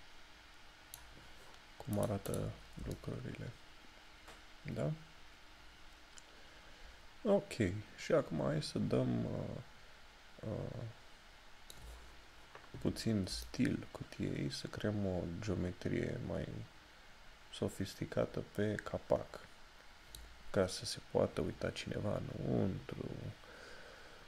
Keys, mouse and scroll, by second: 13.0 scroll down 1, 13.5 shift+middle click.